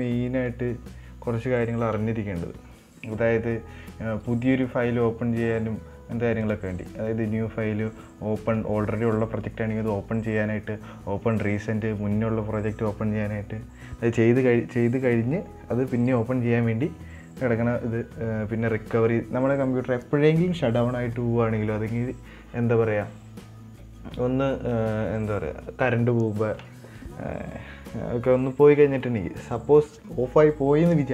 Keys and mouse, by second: 6.7-31.1 drag.